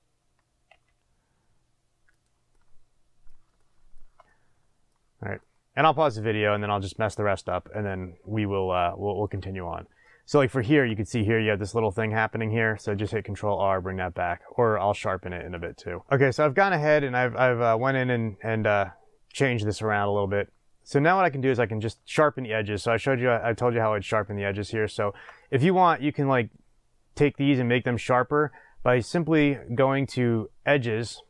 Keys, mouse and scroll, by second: 0.7 g, 2.2 click, 2.5-14.2 middle drag, 12.8 ctrl+r, 14.7 click, 15.5 click, 16.0-29.3 middle drag, 22.1 scroll up 1, 29.3 click, 30.8 click.